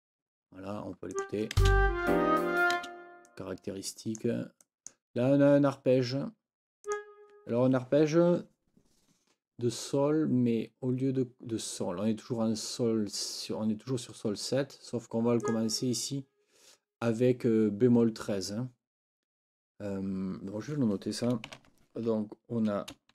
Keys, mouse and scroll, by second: 1.1 click, 1.6 space, 2.8 space, 3.3-4.4 drag, 4.6 click, 4.8 click, 6.9 click, 15.4 click, 21.5 ctrl+t.